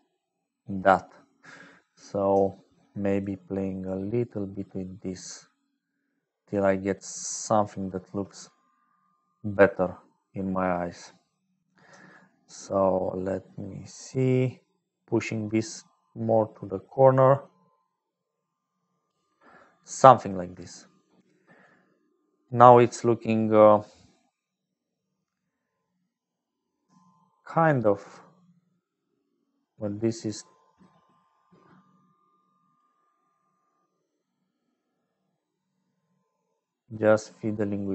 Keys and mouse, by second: 0.0-37.9 typing, 0.0 click, 8.7 click, 12.5-19.1 shift+drag, 19.7 click, 20.5 shift+click, 22.8 click, 27.8-32.8 shift+drag, 33.7-37.9 shift+drag.